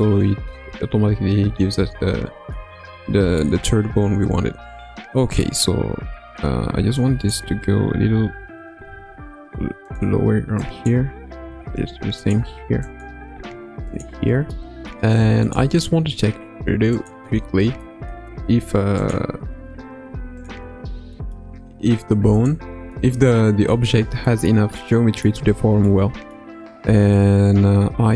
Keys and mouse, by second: 3.4-5.4 middle drag, 7.2 click, 8.3 g, 10.7 click, 11.3 g, 12.8 click, 13.3 g, 14.1 Tab, 14.5 middle click, 15.4 click, 17.0 click, 17.8-18.1 middle drag, 19.0-20.4 drag, 21.1 middle drag, 22.4 click, 22.9-23.3 middle drag, 24.2 shift+middle drag, 24.9-25.2 middle drag, 25.3 Tab, 25.8 middle click, 27.0-28.1 middle drag.